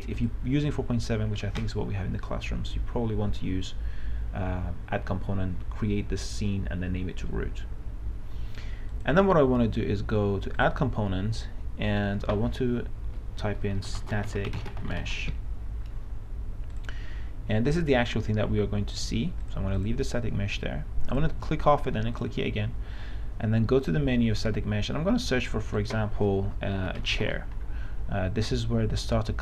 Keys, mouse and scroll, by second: 14.0-15.6 typing, 17.0 click, 27.0-27.9 typing.